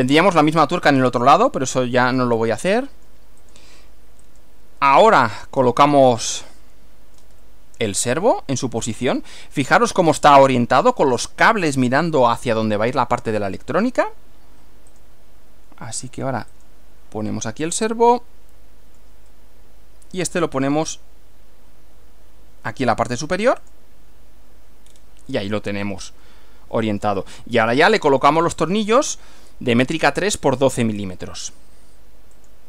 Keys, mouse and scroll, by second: 2.4-3.3 shift+middle drag, 3.4 shift+click, 4.3 click, 5.0 shift+middle click, 6.4-10.3 middle drag, 10.3 scroll up 2, 12.4-13.6 middle drag, 15.0 click, 16.6 click, 18.0-19.2 middle drag, 23.6 click, 24.9-25.2 scroll down 1, 25.4-27.9 middle drag, 27.9 shift+scroll up 1, 30.8-31.2 scroll up 1, 32.4 click.